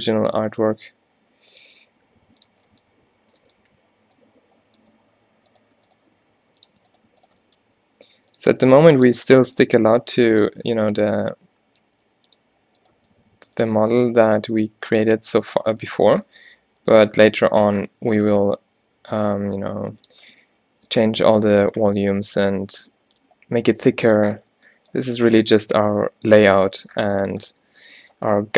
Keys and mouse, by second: 0.2-3.8 typing, 1.4 click, 2.8-3.8 drag, 4.9 z, 6.2 g, 7.8 e, 8.5 e, 10.0 g, 10.6 e, 11.2 e, 13.0 g, 18.8 g, 19.4 e, 20.1 click.